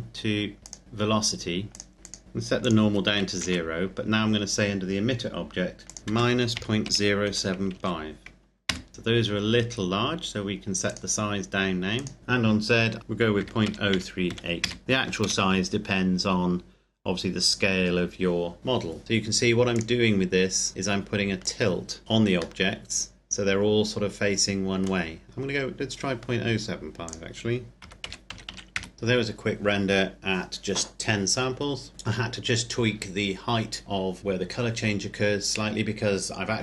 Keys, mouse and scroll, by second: 0.6 click, 2.2 KP_Enter, 2.6 click, 3.3 KP_0, 5.1 KP_Enter, 5.9 click, 6.0 KP_Subtract, 6.5 KP_Decimal, 6.8 KP_0, 7.2 KP_7, 7.7 KP_5, 8.7 KP_Enter, 10.9 click, 13.4-15.2 typing, 14.6 KP_Enter, 19.0 KP_Enter, 19.8 click, 22.0 KP_Enter, 22.6 middle click, 27.0 click, 27.8 KP_Decimal, 27.9 KP_0, 28.2 KP_7, 28.4 KP_5, 28.7 KP_Enter, 28.9 click.